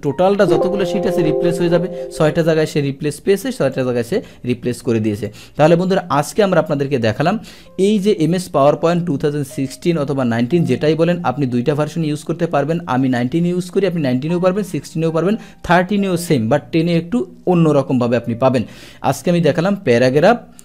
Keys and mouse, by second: 0.1 click, 3.7 click, 5.3 click.